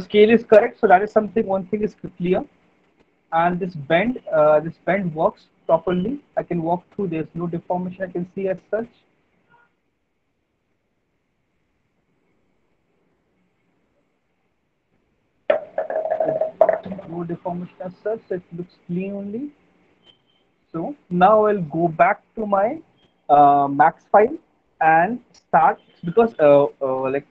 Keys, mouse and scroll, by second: 3.7 w, 4.7-15.3 w.